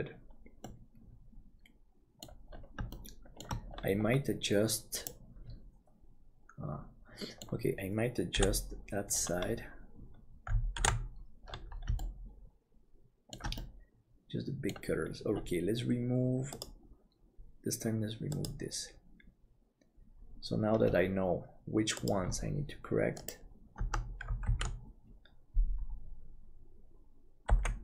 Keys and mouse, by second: 0.6-2.5 middle drag, 2.9 shift+middle click, 6.0-7.5 middle drag, 8.3 KP_7, 10.8 ctrl+KP_7, 12.0-13.4 shift+middle drag, 13.6-14.7 middle drag, 19.5 click, 23.8 Tab, 24.5 alt+a, 27.5 l.